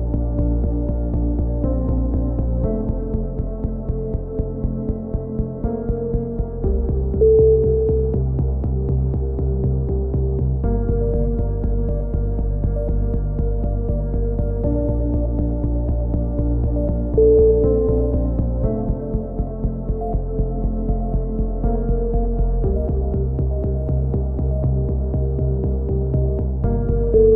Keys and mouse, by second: 0.7 KP_3, 1.1 c, 2.8 right click, 3.0 KP_1, 3.6-5.5 drag, 5.5 a, 5.6 z, 5.7 click, 9.0 click, 9.9 click, 12.2-15.7 drag, 14.2 ctrl+z, 15.7 ctrl+z, 15.7 a, 15.9 click, 16.8 click, 17.0 KP_3, 18.4 Tab.